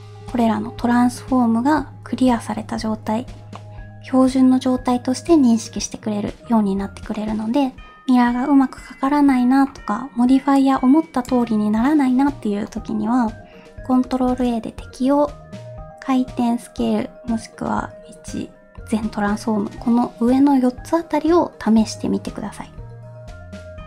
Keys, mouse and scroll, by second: 3.5-5.8 middle drag, 5.8 middle click, 6.0-6.4 scroll up 1, 6.4-7.1 scroll down 2, 7.1-7.4 middle drag, 7.6 scroll up 2, 10.5 click, 11.8 middle click, 12.4 scroll up 1, 12.6-13.4 scroll down 1, 14.2 ctrl+a.